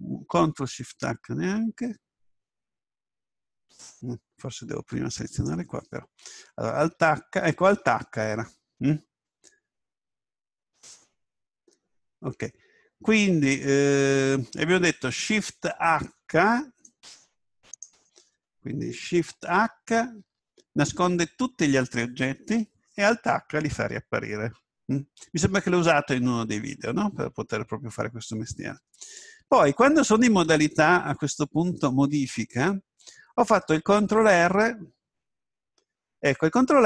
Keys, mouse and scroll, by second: 5.3 right click, 6.8 alt+h, 16.9 right click, 19.4 shift+h, 30.3 Tab.